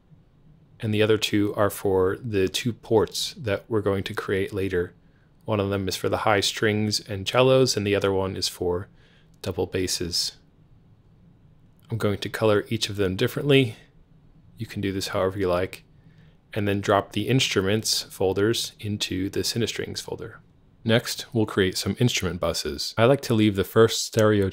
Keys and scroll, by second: 0.4-2.9 typing, 20.7 super+b.